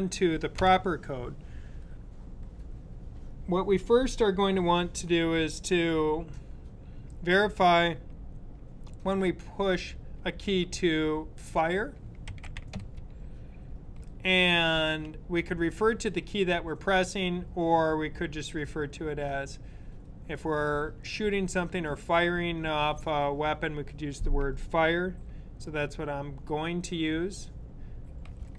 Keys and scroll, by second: 11.9-13.1 typing, 27.8-28.5 typing.